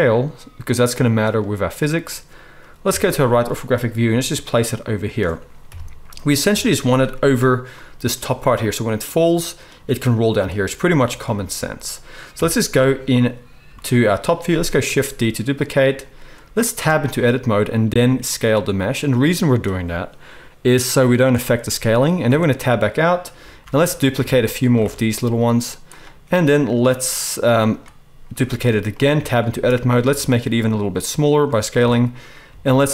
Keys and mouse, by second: 2.9 KP_3, 4.1 g, 5.7 KP_1, 6.5 KP_7, 12.3 KP_7, 14.8 shift+d, 16.8 Tab, 17.9 s, 22.2 Tab, 23.6 shift+d, 23.9-25.9 shift+middle drag, 24.3 shift+d, 24.9 shift+d, 25.9 click, 25.9-27.8 middle drag, 28.4 shift+d, 29.1 Tab, 30.0 s, 31.7 Tab, 32.6-32.9 typing.